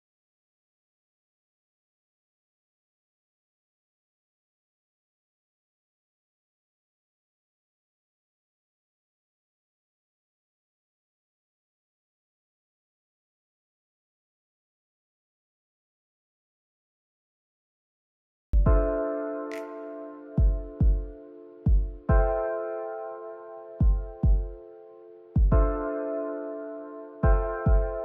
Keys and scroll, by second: 4.5 u, 14.0 ctrl+s, 18.0 u.